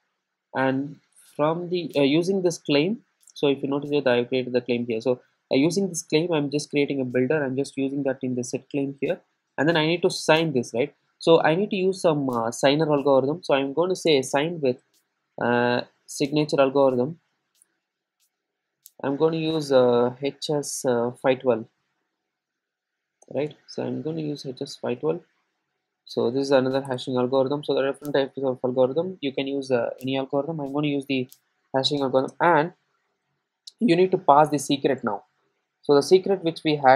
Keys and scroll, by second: 14.1 Return, 23.3 Return, 28.6 super+z.